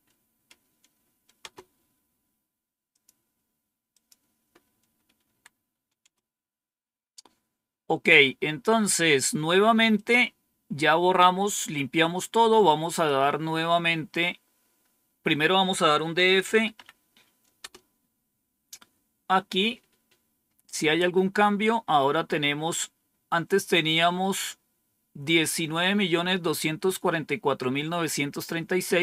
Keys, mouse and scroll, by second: 1.3 Return, 2.8 click, 3.8 click, 5.2 Down, 6.0 Return, 8.6-9.5 scroll down 2, 9.9 click, 12.8 click, 16.2-17.2 typing, 17.5 Return.